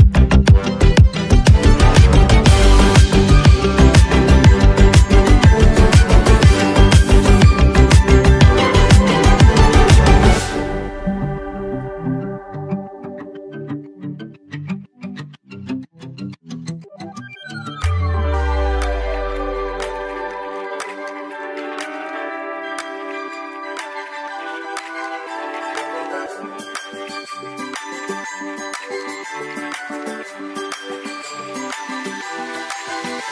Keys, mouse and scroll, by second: 2.5-8.7 drag, 8.8 ctrl+s, 12.7 right click, 16.8 click, 19.7 ctrl+z, 20.7 right click, 22.2 click, 23.5 right click, 24.6 click, 25.8 right click, 26.8 click, 26.9 click, 28.7 ctrl+s, 30.8-31.2 alt+scroll up 1, 32.4-33.3 drag.